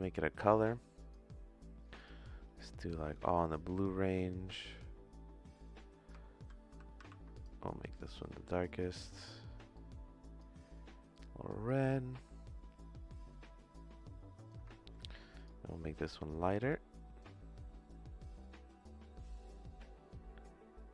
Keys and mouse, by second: 1.9 click, 4.7 click, 6.3 ctrl+c, 6.7 ctrl+v, 7.0 ctrl+v, 7.3 click, 11.1 click, 15.0 ctrl+z.